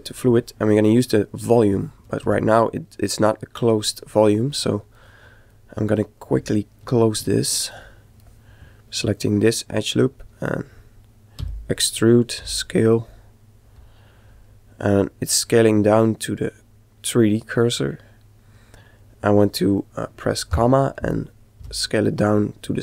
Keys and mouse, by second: 2.2 Tab, 3.2-5.6 middle drag, 9.2-11.1 right drag, 11.4 e, 11.7 middle click, 19.5 ,, 21.6 s.